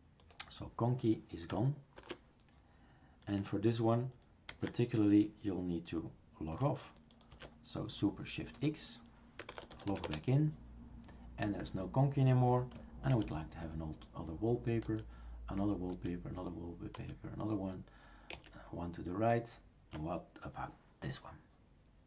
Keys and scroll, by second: 2.0 shift+3, 4.5 ctrl+s, 7.3 shift+super+x, 13.1 alt+t, 14.9 alt+t, 15.9 alt+t, 17.2 alt+t, 18.3 alt+Right.